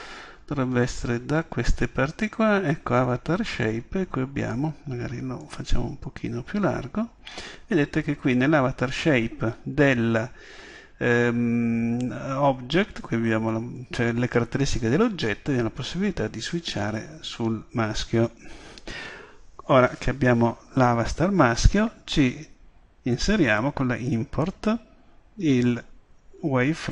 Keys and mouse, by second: 5.4-7.1 drag, 7.2-17.0 middle drag, 17.0-18.4 drag, 18.4 middle click.